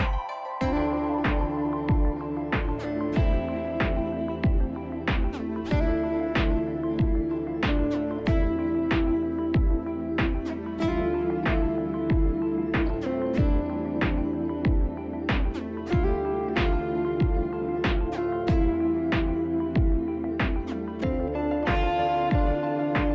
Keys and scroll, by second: 1.3 shift+s, 4.9 shift+s, 6.2 ctrl+shift+s, 8.6 shift+s, 8.9 shift+s, 9.3 shift+s, 9.8 shift+s, 11.9 shift+s, 12.4 shift+s, 14.3-16.0 typing, 15.6 ctrl+z.